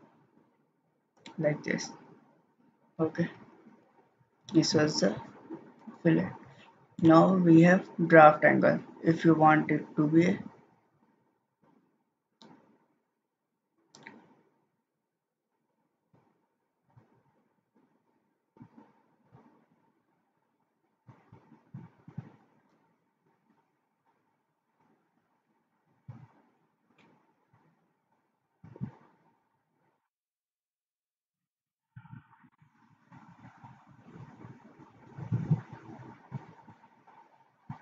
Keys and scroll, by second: 3.3 ctrl+z, 3.8 ctrl+z, 4.4 ctrl+z.